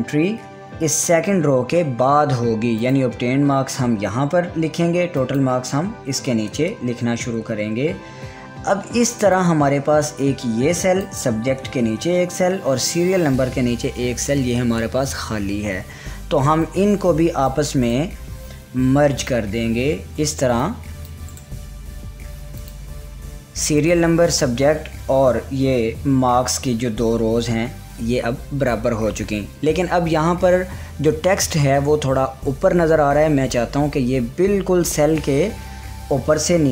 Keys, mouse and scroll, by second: 1.5 click, 1.5 click, 2.1 Tab, 3.3 click, 5.7 click, 6.3 Tab, 9.9-17.2 drag, 17.2-18.4 drag, 18.4 right click, 19.7-23.1 drag, 21.9 right click.